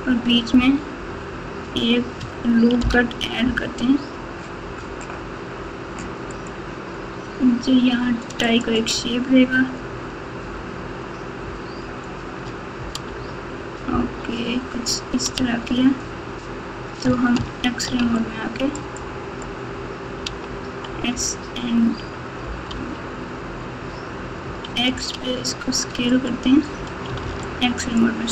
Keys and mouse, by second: 2.7 ctrl+r, 13.0 Tab, 13.8 KP_Divide, 15.3 Tab, 17.3 alt+z, 18.0 alt+z, 18.1 alt+click, 20.2 s, 27.2 alt+z, 27.5 click.